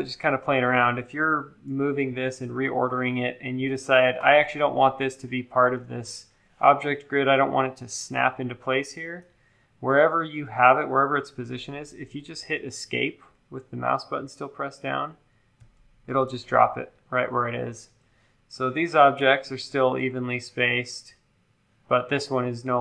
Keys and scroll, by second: 15.6 BackSpace.